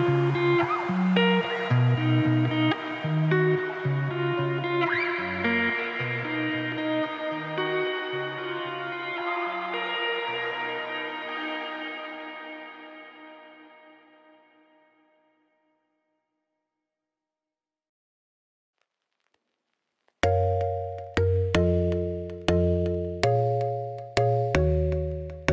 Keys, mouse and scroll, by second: 0.4 alt+Left, 0.7 alt+Left, 0.8 s, 1.5 ctrl+r, 2.0 s, 2.8 alt+Left, 2.9 s, 3.5 alt+Left, 3.6 s, 4.1 alt+Left, 4.2 s, 7.3 alt+Left, 7.5 g, 8.6 alt+click, 8.7 g, 10.7 click, 12.1 alt+click, 12.5 shift+s, 13.2 click, 14.4 ., 14.7 r, 18.5 click, 18.9 shift+s, 19.0 Tab, 21.7 click, 22.2 Tab, 22.3 s, 22.9 s, 23.8 r, 24.8 Tab, 25.0 s.